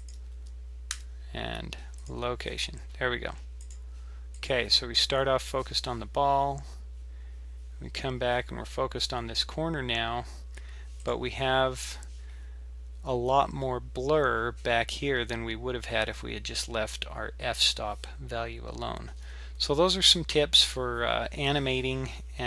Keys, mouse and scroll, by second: 3.6 click, 4.4 click, 11.0 click.